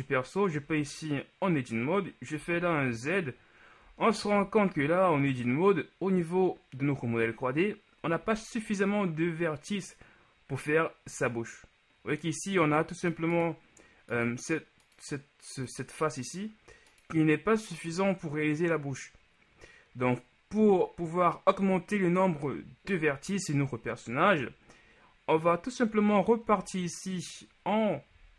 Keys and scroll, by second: 0.8 Tab, 2.5 z, 8.6 z, 26.6 Tab.